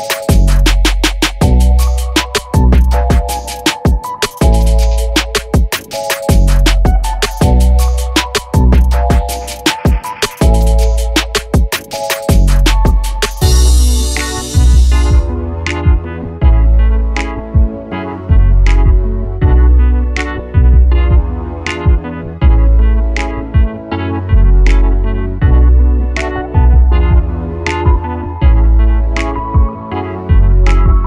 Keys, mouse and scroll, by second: 0.5 scroll down 1, 0.8 click, 1.3 alt+d, 2.5 g, 3.6 click, 4.0 alt+d, 4.8 r, 5.9 alt+a, 6.0 scroll up 1, 6.2 click, 6.3 s, 6.6 alt+a, 6.8 click, 7.2 alt+d, 8.1 r, 8.9 alt+a, 9.2 click, 9.4 alt+d, 10.0 r, 11.2 s, 11.5 g, 12.2 g, 13.2 g, 14.1 scroll down 1, 14.3 scroll up 1, 14.5 alt+a, 14.6-15.0 drag, 15.0 g, 16.2 click, 16.5 alt+d, 17.0 r, 19.0-21.5 typing, 22.0 alt+d, 22.9 h, 23.9 scroll down 1, 24.1 ctrl+z, 24.3-24.7 scroll up 1, 24.7 r, 25.6 g, 26.1 r, 26.7 g, 27.8 s, 27.9 alt+a, 28.7 click, 29.3 alt+d, 30.1 r, 30.7 r.